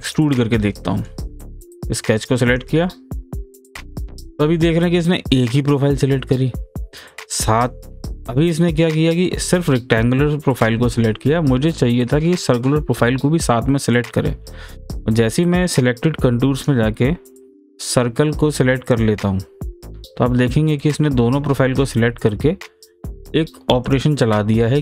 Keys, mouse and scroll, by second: 0.1 click, 0.6-2.5 middle drag, 2.5 click, 3.5-7.1 middle drag, 16.6 click, 18.9 click, 23.1 click, 23.1 typing, 24.5-24.8 middle drag.